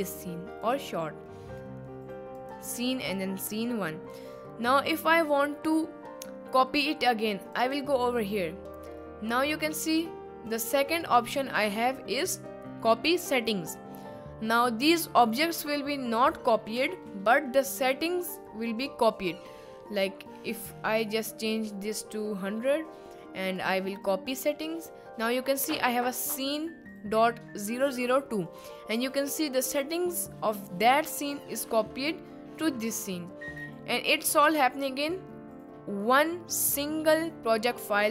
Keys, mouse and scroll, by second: 0.1 click, 2.3 click, 7.7-9.3 drag, 10.6 click, 11.8-14.5 drag, 17.7 click, 21.6 click, 23.6-24.8 drag.